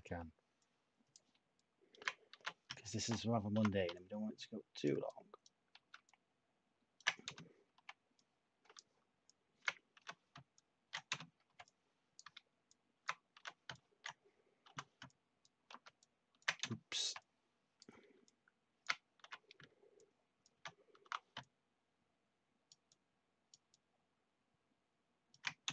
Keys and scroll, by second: 2.3 h, 3.5 t, 5.7 ctrl+z, 7.2 /, 9.9 h, 11.0 /, 13.3 h, 14.6 t, 15.6 ctrl+z, 16.6 /, 19.2 h, 21.0 t, 25.6 /.